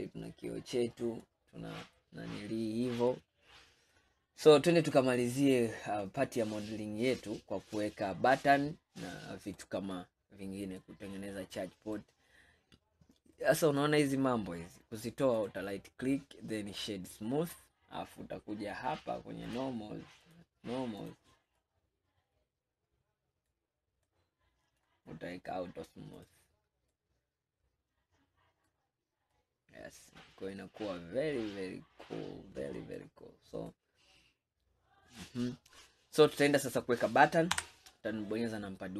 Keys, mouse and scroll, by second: 1.3-2.0 scroll down 3, 2.0-3.5 middle drag, 3.5-4.0 scroll down 1, 4.0-7.1 middle drag, 10.1-10.9 scroll up 4, 10.9-12.7 middle drag, 12.7-13.4 scroll up 3, 13.4-15.4 middle drag, 15.4-18.3 right drag, 18.3-19.3 scroll down 1, 19.3 scroll down 1, 19.6 click, 20.3 click, 21.1-21.9 drag, 21.9-23.7 middle drag, 23.7-24.2 scroll down 1, 24.2-26.2 middle drag, 26.2 click, 27.0-29.0 middle drag, 29.0-29.4 scroll up 1, 29.4-32.4 middle drag, 33.7-36.9 middle drag, 36.9 scroll down 1, 37.6 KP_1, 38.5 scroll down 3.